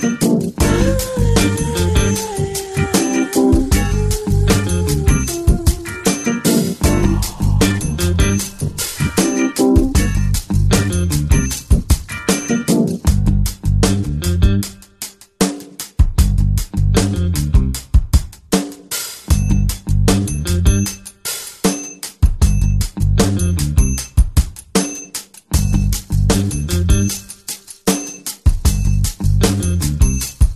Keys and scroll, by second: 1.1 [, 14.5-14.8 typing, 19.4 ], 28.1 ].